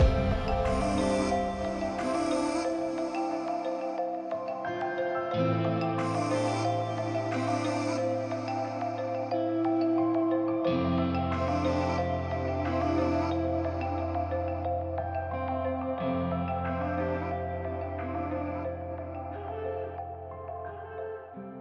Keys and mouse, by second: 3.3 shift+click, 4.0 right click, 4.0-6.8 typing, 4.9 ctrl+z, 5.0 ctrl+z, 6.6 ctrl+z, 9.1 r, 10.2 g, 10.3 z, 13.6 g, 15.7-16.4 drag, 17.9 r, 18.1 r.